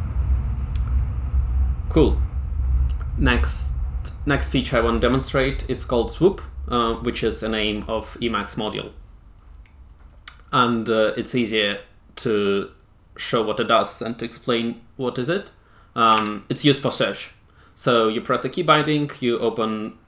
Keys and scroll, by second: 16.0 space, 16.1 Return.